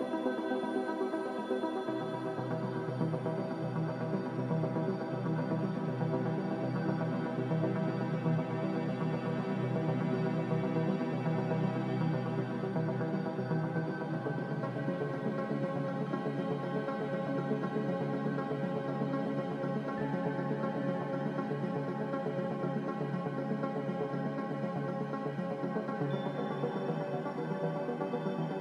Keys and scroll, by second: 10.4-11.2 typing.